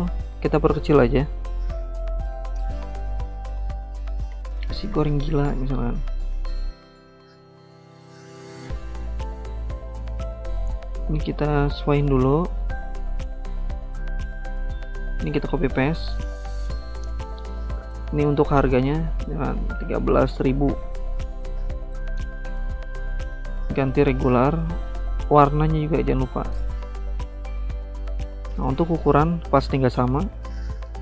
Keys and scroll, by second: 4.3-5.9 typing, 14.9 ctrl+c, 15.1 ctrl+v, 17.7-22.3 typing, 24.3-26.7 typing.